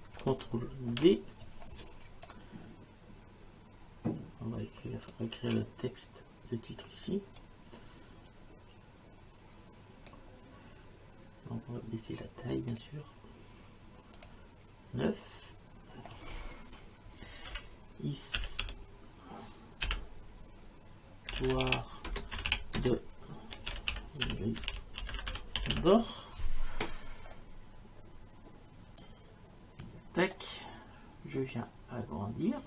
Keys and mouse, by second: 0.9 ctrl+d, 5.1 click, 7.1 click, 12.7 click, 14.2 click, 17.5 h, 18.4 i, 18.6 s, 19.8 t, 21.1-26.2 typing, 29.0 click, 31.5 click.